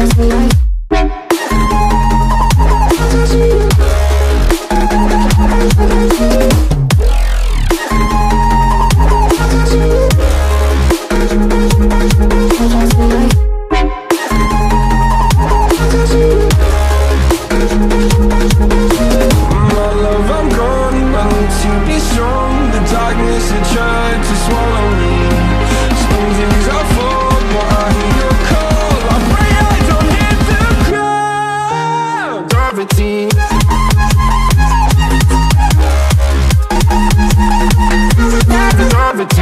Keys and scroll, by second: 2.5 Right, 5.5 Right, 11.3 Right, 35.3 Left.